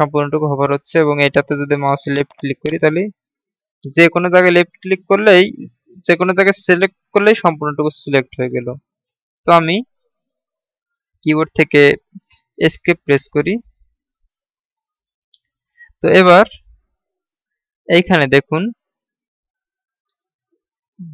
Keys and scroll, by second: 12.4 Escape.